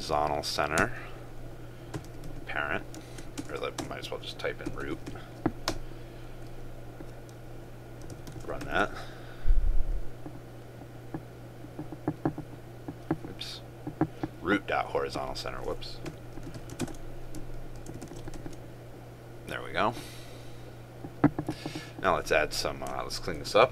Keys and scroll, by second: 8.2 ctrl+s, 8.8 ctrl+r, 16.9 ctrl+space, 17.9 ctrl+s, 18.5 ctrl+s.